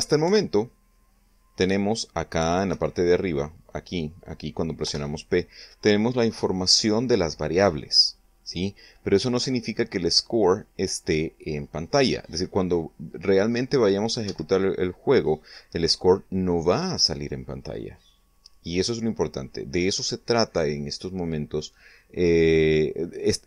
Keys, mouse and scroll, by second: 0.7 p, 3.2 Escape, 5.3 p, 14.7 Escape.